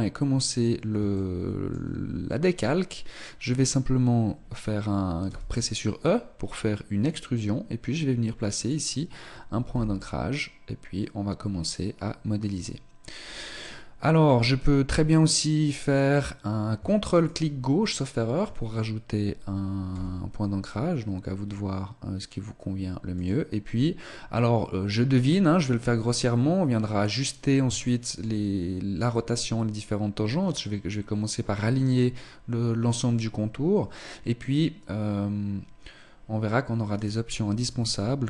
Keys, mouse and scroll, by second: 1.1 shift+middle click, 4.7 e, 9.5 r, 17.2 ctrl+click, 19.9 r, 27.7 shift+middle click, 36.9 right click.